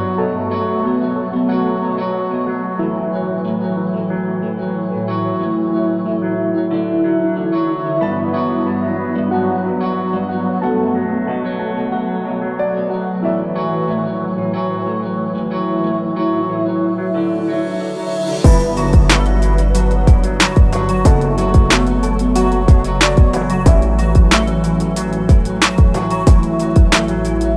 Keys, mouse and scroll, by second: 1.5 click, 2.3 alt+click, 3.7-4.3 scroll up 1, 5.1 alt+shift+click, 5.8-6.2 scroll up 1, 7.2 click, 11.0 shift+click, 11.5 shift+click, 12.9 shift+click, 14.9 shift+click, 16.6 click, 17.0 alt+scroll down 1, 17.8 scroll up 1, 18.5 click, 22.2 ctrl+z, 25.4 click, 26.0-26.9 alt+scroll up 2, 26.9 click.